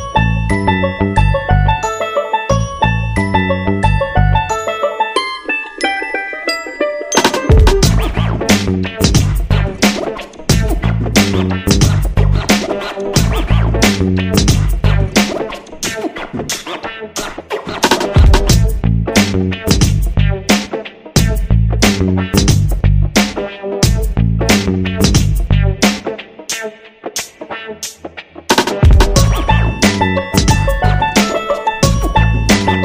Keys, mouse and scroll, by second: 1.6-2.3 ctrl+scroll down 1, 2.4-2.9 ctrl+scroll down 1, 2.9 click, 10.2 shift+click, 11.0 click, 11.8 shift+click, 13.2 shift+click, 14.0 shift+click, 14.8 shift+click, 15.2 shift+click, 18.0 ctrl+shift+click, 25.0 shift+click, 26.0 click.